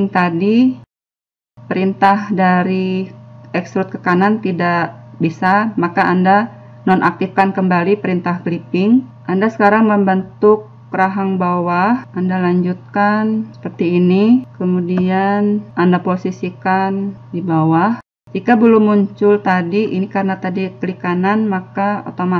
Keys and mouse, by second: 9.3 click, 9.8 e, 10.3 e, 10.7 e, 12.0 e, 13.0 b, 14.5 right click, 14.8 click, 17.1 right click, 17.7 middle click, 18.3-21.5 drag, 21.5-22.3 middle drag.